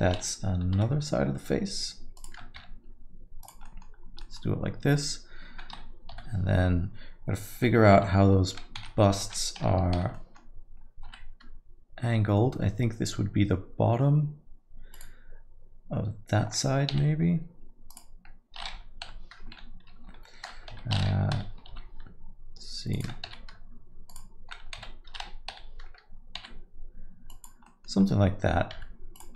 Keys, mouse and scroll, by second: 0.8 r, 2.6 g, 3.6 middle click, 4.0-4.4 scroll down 2, 4.2 middle click, 6.1 l, 8.0 r, 9.2 alt+a, 9.9 l, 10.1 middle click, 11.1 r, 16.9 g, 19.0 l, 20.7 alt+a, 21.3 l, 21.7 r, 23.3 g, 24.8 alt+a, 25.5 l, 26.4 g, 27.6 middle click, 28.7 g.